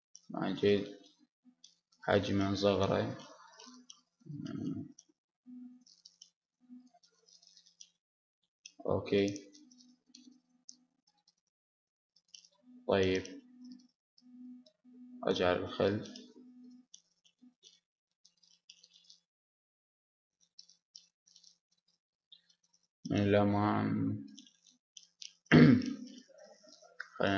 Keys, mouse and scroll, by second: 1.1-2.7 drag, 6.8-8.4 drag, 8.5 click, 8.6 middle click, 10.7 g, 11.0 click, 14.4 middle click, 14.7 click, 14.8-16.9 middle drag, 19.4 middle click, 20.5 middle click, 21.1-22.7 middle drag, 22.6 KP_1, 22.8 middle click, 24.2 KP_5, 24.7 KP_3, 25.6 middle click, 26.2 middle click, 26.9 r.